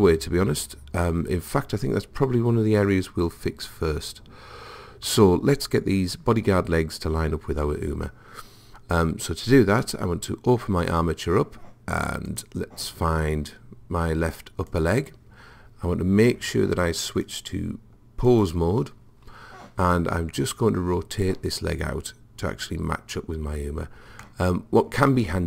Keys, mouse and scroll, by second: 10.9-14.2 drag, 14.7 click, 17.1 click, 24.3 middle click, 24.4 middle click, 24.7-25.4 middle drag.